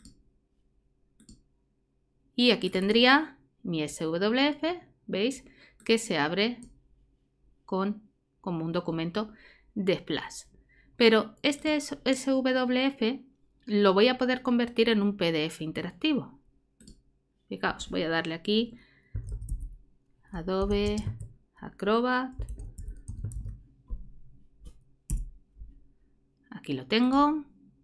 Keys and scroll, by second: 18.9-21.1 typing, 22.1-23.8 typing, 25.1 BackSpace.